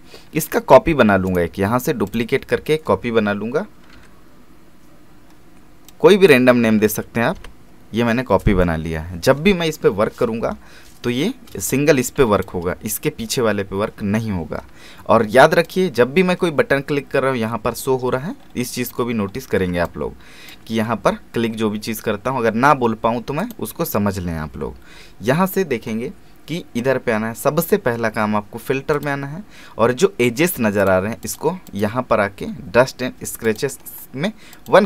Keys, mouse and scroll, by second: 1.3 right click, 2.1 click, 3.9 Right, 5.9-7.3 drag, 7.3 Return, 8.4-9.2 scroll down 1, 11.5 space, 11.7 click, 12.0 space, 15.6 click, 18.7-19.1 scroll up 1, 19.3-19.7 alt+scroll down 1, 19.7 alt+space, 23.4 click, 28.1-28.9 scroll up 1, 28.9-34.8 drag.